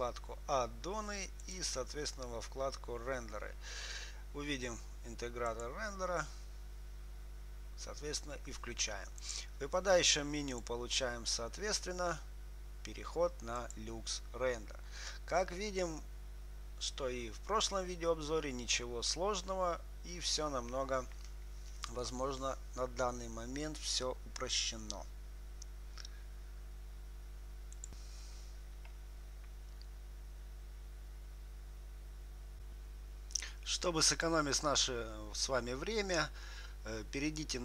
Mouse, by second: 1.4-3.6 drag, 17.8-21.1 drag.